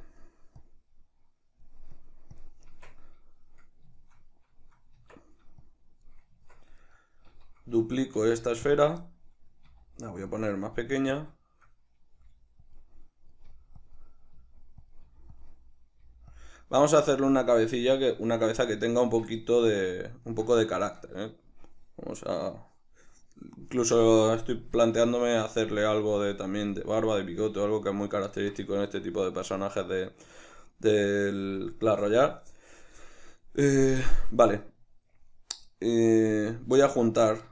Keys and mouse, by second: 2.7 Tab, 3.1-5.7 middle drag, 5.0 Tab, 5.7-6.8 drag, 6.4 Tab, 6.8 right click, 8.2 shift+d, 8.8 click, 9.3-10.4 middle drag, 9.7 s, 10.4 click, 10.7 middle click, 10.7 s, 11.2 click, 11.4-12.8 shift+middle drag, 12.2 g, 12.8 click, 12.9-13.9 middle drag, 13.5 g, 13.9 click, 14.0-15.0 middle drag, 14.4 s, 15.0 click, 15.1 g, 15.4 click, 15.5 middle click, 16.0 g, 16.4 click, 16.6 middle click, 17.0 g, 17.4 click, 17.8-32.4 shift+middle drag, 19.1 Tab, 32.4 right click, 36.4 right drag, 36.8 shift+right click.